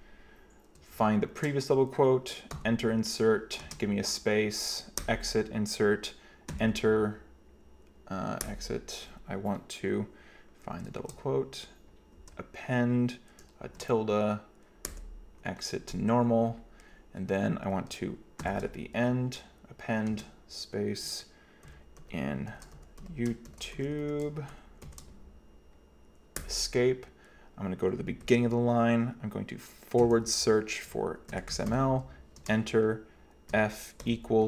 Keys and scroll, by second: 0.9-1.3 typing, 2.6 typing, 3.7 typing, 5.0 Escape, 6.6 a, 8.5 Escape, 10.7 typing, 12.2 typing, 13.7 typing, 14.9 Escape, 18.5 shift+a, 20.1 typing, 21.7-25.3 typing, 26.4 Escape, 28.3 0, 30.0 /, 31.1-34.4 typing.